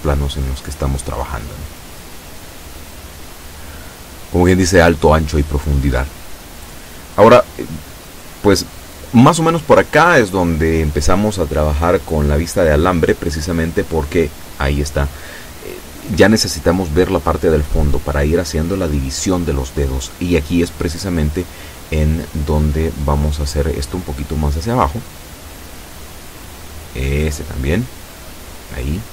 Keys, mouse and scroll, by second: 9.9 a, 13.5 z, 16.5-16.9 scroll up 2, 17.1-18.8 shift+middle drag, 20.3 a, 21.3 a, 21.8 b, 22.0 click, 23.1-24.7 drag, 24.7-26.3 middle drag, 24.9 a, 25.8 b, 26.3 click, 27.7 click.